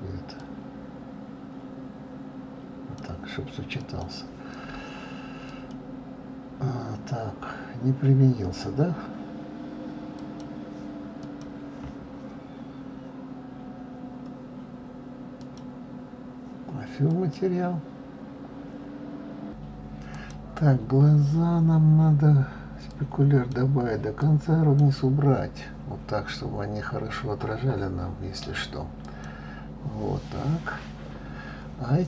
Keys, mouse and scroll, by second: 5.5 click, 10.2 click, 11.2 click, 15.4-17.3 drag, 20.3 click, 22.9-27.2 drag, 29.0 click.